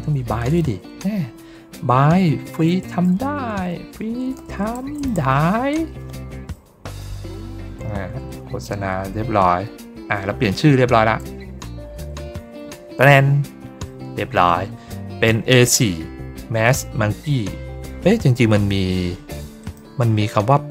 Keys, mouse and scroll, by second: 19.5 click.